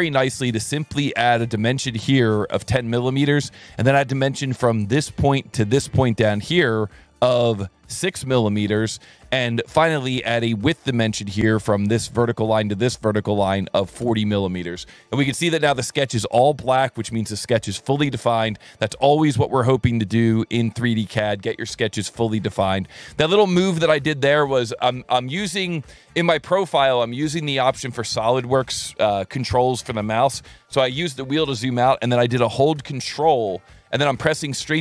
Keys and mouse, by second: 1.0 click, 1.7 click, 2.4 KP_1, 2.5 KP_0, 2.7 KP_Enter, 4.8 click, 6.1 click, 7.7 click, 8.4 KP_6, 8.6 KP_Enter, 11.1 click, 12.1 click, 12.7 click, 13.7 KP_4, 13.8 KP_0, 14.0 KP_Enter.